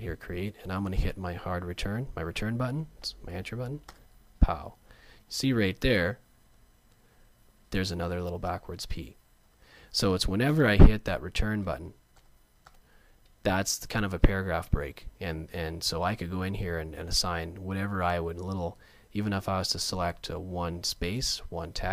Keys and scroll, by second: 3.9 Return, 11.1 Return.